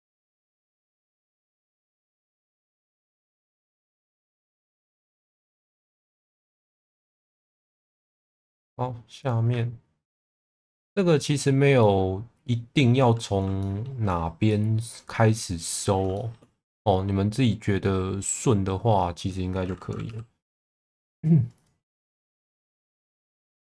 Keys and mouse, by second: 0.7 2, 1.8 1, 2.8 click, 4.0 shift+middle click, 5.7 middle click, 6.7 2, 7.3 shift+middle click, 7.8 middle click, 9.2 click, 10.7 middle click, 11.9-13.4 middle drag, 13.6 shift+middle click, 14.5-15.9 middle drag, 16.1 shift+middle click, 16.7-19.1 middle drag, 20.1 e, 20.6 z, 21.6 click, 23.3 f, 23.4 v.